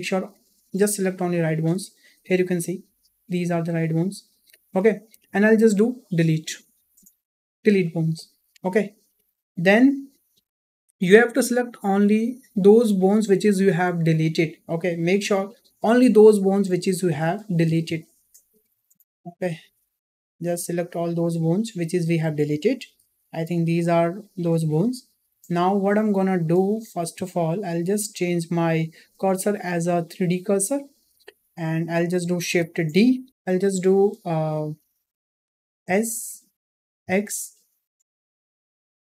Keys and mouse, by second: 0.2 shift+click, 1.2 shift+middle drag, 2.2 g, 4.9 shift+middle click, 6.0 Delete, 11.2-12.5 drag, 13.7-14.2 shift+drag, 15.0 shift+click, 16.4-17.0 shift+drag, 18.1 ctrl+click, 19.2-19.5 shift+drag, 20.7 shift+click, 21.2 shift+click, 21.7 shift+click, 23.3-24.4 drag, 25.4 shift+middle click, 26.7 shift+middle click, 28.7-30.3 drag, 32.3 shift+d, 35.7 s.